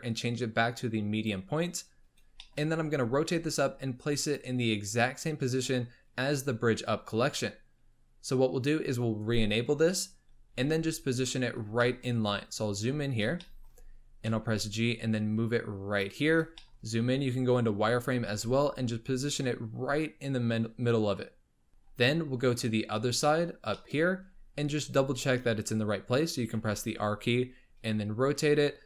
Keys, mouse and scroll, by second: 1.9 scroll up 1, 2.4 shift+middle click, 2.7 r, 9.1 shift+click, 10.2-10.5 scroll up 3, 10.5 g, 11.5 scroll up 2, 11.8-12.1 shift+middle drag, 12.1-13.4 scroll up 14, 13.4-13.7 shift+middle drag, 13.7-14.3 scroll up 3, 14.3 g, 16.2-16.9 scroll up 4, 16.6 shift+middle click, 16.9 z, 17.7-18.2 scroll up 7, 18.2 g, 21.7-23.2 scroll down 26, 23.2 shift+middle click, 24.0-26.1 scroll up 18, 26.1-26.5 scroll up 2, 26.5 r.